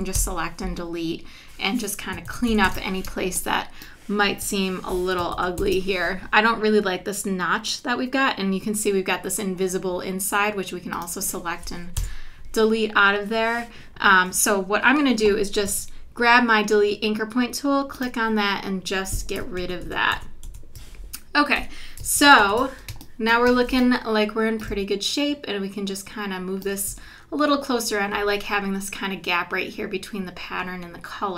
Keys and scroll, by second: 0.2 BackSpace, 0.7 BackSpace, 2.3 super+=, 3.1 space, 5.3 super+=, 12.0 BackSpace, 12.5 BackSpace, 15.7 -, 16.2 -, 19.6 super+-, 21.6 v, 22.1 super+-, 22.9 space.